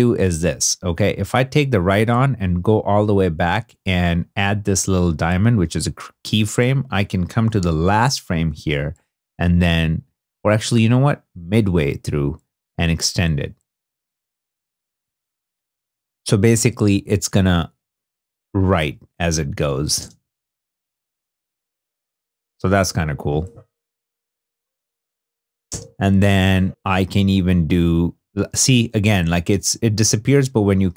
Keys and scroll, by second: 7.6 shift+Left, 19.9 shift+space, 25.6 shift+space.